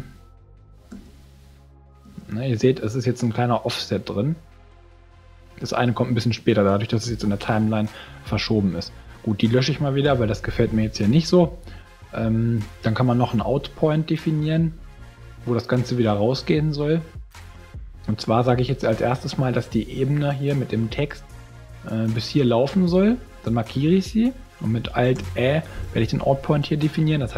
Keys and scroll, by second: 0.9 space, 10.0 shift+BackSpace, 25.1 alt+ä.